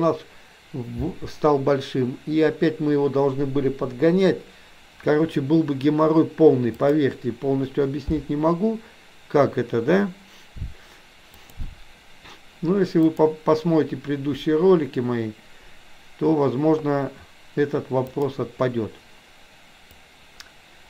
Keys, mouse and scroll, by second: 6.9-10.9 drag, 11.4 click, 13.2-18.3 drag, 19.9-20.8 drag.